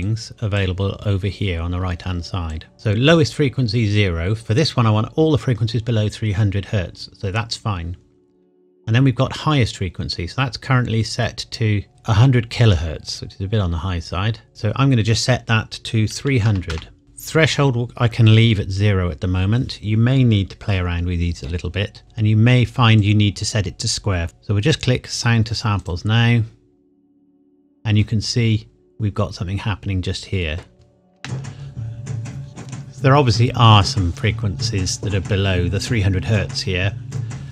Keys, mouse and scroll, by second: 0.0 click, 14.5 click, 16.1 KP_3, 16.4 KP_0, 22.0 click, 25.8 click, 27.2-27.9 scroll down 1, 27.9-28.7 scroll up 1, 28.7-30.7 scroll down 1, 30.7 scroll up 1, 30.8 scroll down 1, 31.1 space.